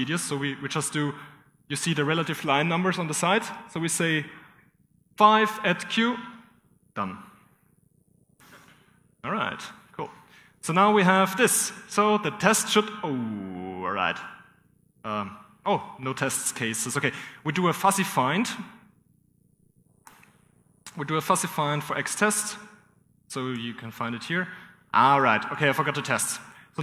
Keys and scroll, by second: 1.4 typing, 7.3-8.1 typing, 8.4 ctrl+[, 9.5-10.3 typing, 10.5 ctrl+[, 15.2 ctrl+j, 15.3 ctrl+[, 17.2 :, 18.6 typing, 22.3-23.0 typing, 24.2 Return, 26.5-26.8 typing.